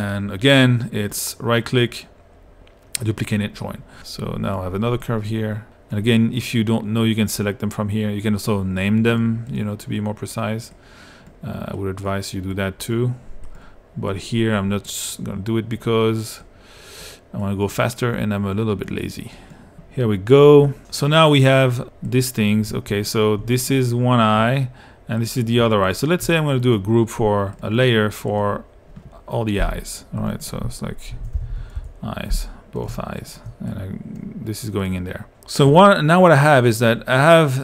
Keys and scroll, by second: 30.9-32.1 typing.